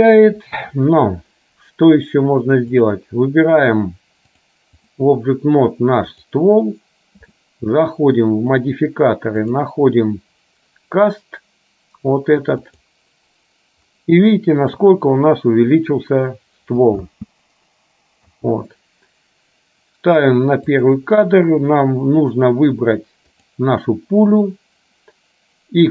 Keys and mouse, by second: 4.5 click, 6.2 click, 8.6 click, 9.5-13.0 drag, 14.5 shift+middle click, 17.1 space, 20.9 click, 22.5-23.6 drag.